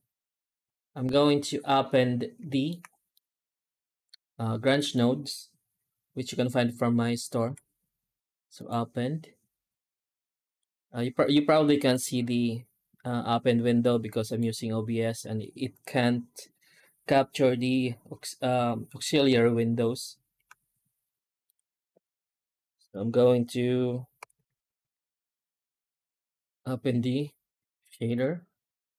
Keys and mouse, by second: 1.5-2.5 middle drag, 3.0-4.8 middle drag, 7.3 F4.